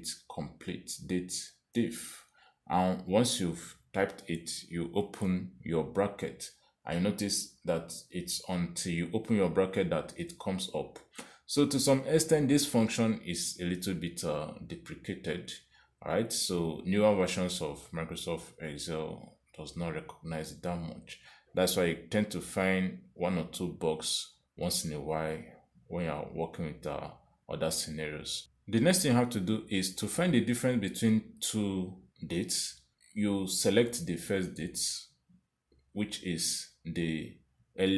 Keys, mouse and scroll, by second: 0.8 shift+9, 33.7 click.